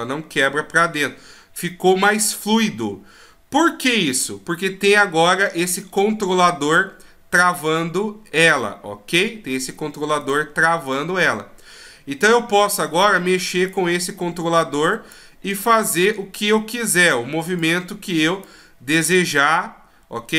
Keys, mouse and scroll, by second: 4.9 right click, 5.3 middle click, 7.8 scroll down 1, 8.4 scroll up 1, 10.2 right click, 10.9 right click, 13.7 click, 15.8 right click, 16.2 middle click, 16.9 right click, 17.5 right click, 18.4 click, 19.5 r.